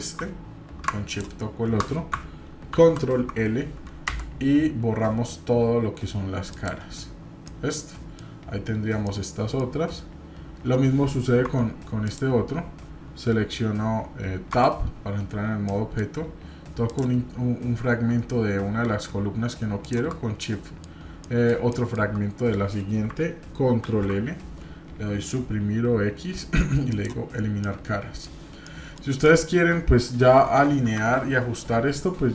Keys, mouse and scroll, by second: 1.1 shift+click, 2.7 ctrl+l, 4.1 Delete, 7.4 middle click, 9.1 middle click, 11.4 Tab, 12.1 click, 14.5 Tab, 15.6 middle click, 16.8 click, 19.8 shift+click, 20.4 middle click, 21.2 middle click, 21.7 shift+middle click, 22.4 scroll up 1, 23.7 ctrl+l, 25.1 Delete, 27.6 middle click, 28.3-28.6 scroll down 2, 28.6 middle click, 29.2 middle click, 30.8 KP_7.